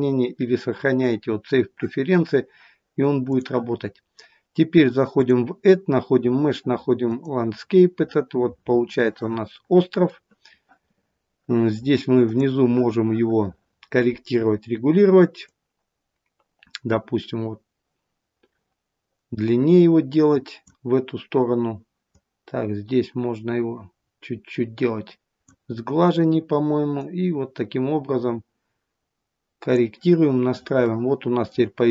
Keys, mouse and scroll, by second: 5.2 click, 9.0 middle click, 9.0 scroll up 6, 15.5 click, 22.0 click, 26.8 click, 30.7 middle click.